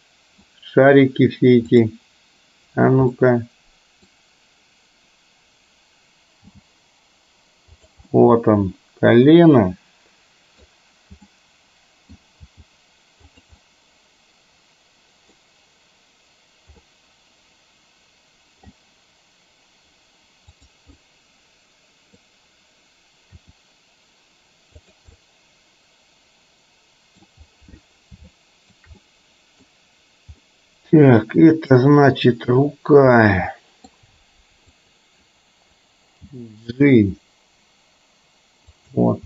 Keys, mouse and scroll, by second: 1.9 click, 3.3-4.0 middle drag, 6.5 g, 8.2-10.7 middle drag, 11.4-12.2 middle drag, 12.5 g, 13.7-15.4 middle drag, 17.0-18.8 middle drag, 20.7 drag, 21.0-22.3 middle drag, 23.4 r, 25.3-27.4 middle drag, 28.3-28.8 shift+middle drag, 29.0-29.8 middle drag, 30.7-31.8 middle drag, 33.3-33.9 middle drag, 34.8 click, 36.3 g.